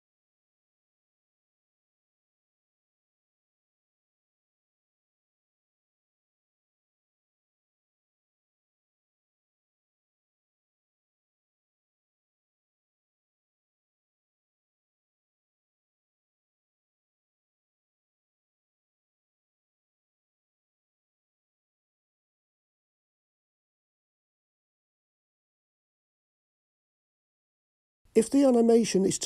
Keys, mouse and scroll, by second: 28.0 drag.